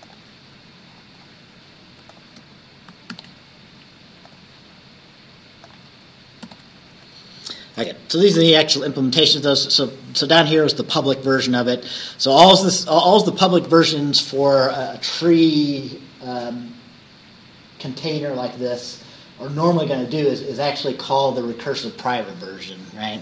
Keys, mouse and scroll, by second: 0.1 click, 1.0 scroll down 1, 2.2 shift+click, 3.2 ctrl+c, 4.4 click, 5.7 click, 6.5 ctrl+v, 7.9 Return.